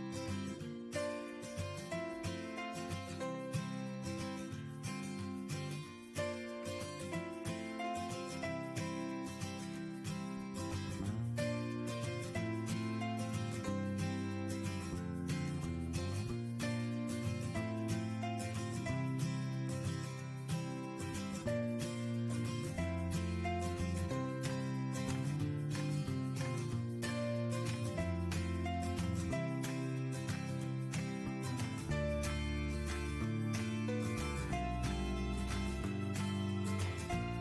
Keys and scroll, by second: 0.8 Tab, 6.0 Down, 7.4 Tab, 9.4 Down, 10.2 Tab, 30.8 Down, 31.6 Tab.